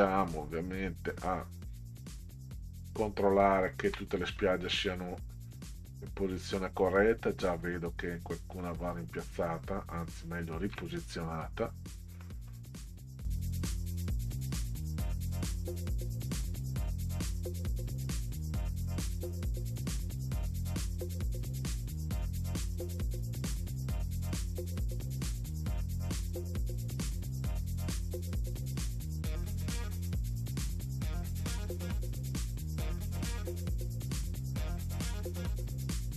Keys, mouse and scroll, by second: 0.6 ctrl+scroll up 2, 4.4-4.7 middle drag, 5.1 ctrl+scroll up 2, 6.4 ctrl+scroll up 2, 8.5 ctrl+scroll up 2, 10.2 ctrl+scroll up 2, 12.2 middle drag, 12.2 scroll up 2, 14.6 ctrl+click, 16.4-19.3 drag, 20.2 ctrl+z, 22.1 ctrl+click, 25.0-28.0 drag, 31.2 middle drag, 33.9 ctrl+z.